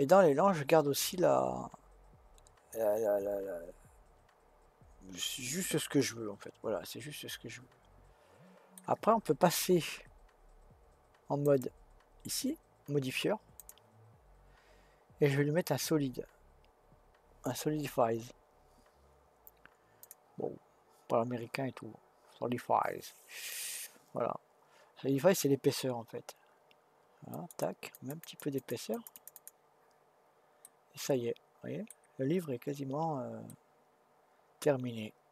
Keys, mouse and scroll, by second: 11.4 click, 13.5-16.7 drag, 27.3-30.6 drag, 30.6-32.6 middle drag, 32.6-33.5 scroll up 1, 33.5-35.3 middle drag.